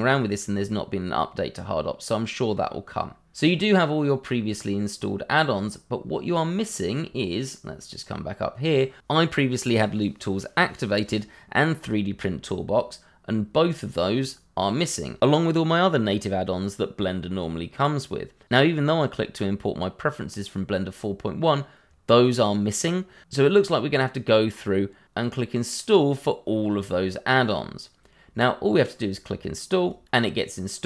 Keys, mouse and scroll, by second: 3.5-4.2 scroll up 1, 5.5 click, 29.8 click.